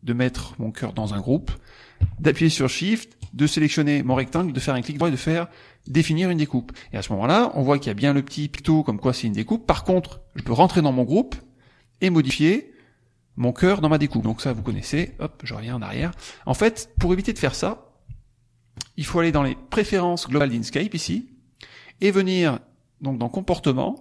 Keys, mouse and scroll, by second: 3.1 shift+click, 4.2 shift+right click, 5.7 click, 10.5 click, 11.3 click, 12.0-14.0 drag, 14.2 click, 14.7 ctrl+z, 15.7 ctrl+click, 17.4 ctrl+z, 21.0 click.